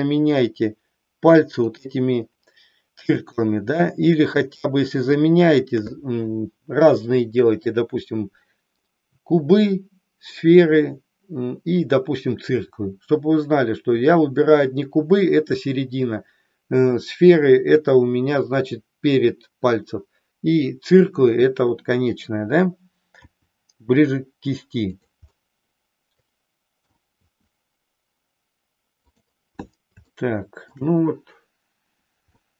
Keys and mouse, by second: 1.6-2.7 shift+drag, 3.5-4.5 middle drag, 4.7-5.7 shift+middle drag, 23.1 r, 25.0 click, 25.4-26.9 middle drag, 27.3 r, 29.3 click, 30.1 shift+middle click, 32.4 middle click.